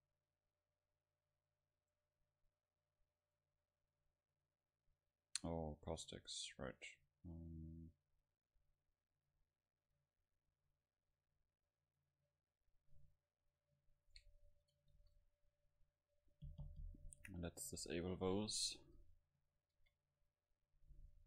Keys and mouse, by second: 0.5-5.9 middle drag, 6.7-13.9 drag, 15.0 ctrl+s, 19.8 shift+a.